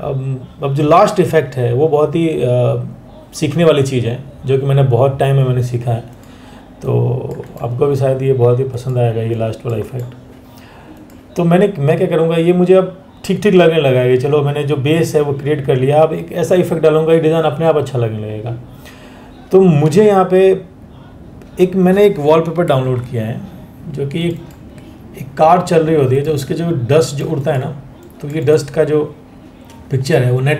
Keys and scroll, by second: 22.4 ctrl+o.